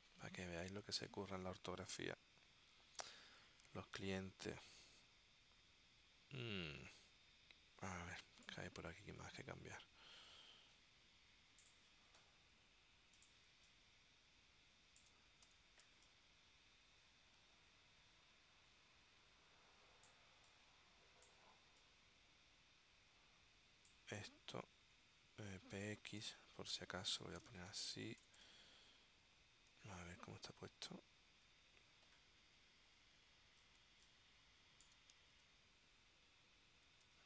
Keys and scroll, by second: 13.6 space, 15.6 w, 16.0 space, 25.1 w, 26.3 super+f, 27.2-28.6 typing, 30.1 super+Tab, 33.9 space, 35.4 super+Tab, 37.1 super+Tab.